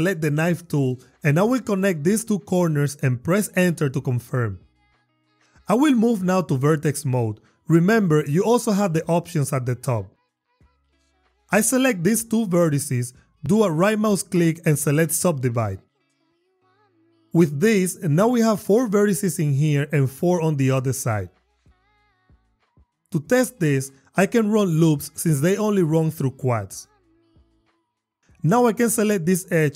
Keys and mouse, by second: 1.9 click, 3.0 click, 3.8 Return, 6.1 Tab, 11.1 click, 14.4-15.9 drag, 16.2 click, 24.0 ctrl+r, 27.8 Tab, 28.0 click.